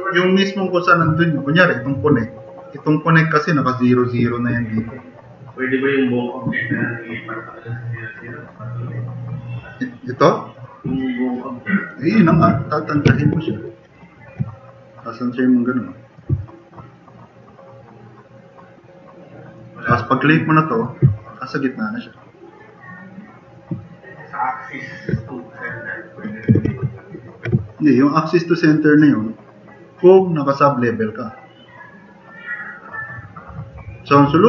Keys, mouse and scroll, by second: 18.3 click, 18.7-19.2 drag, 21.2 drag, 22.7-23.3 drag, 23.3 drag, 26.7 ctrl+z, 27.7-28.0 drag.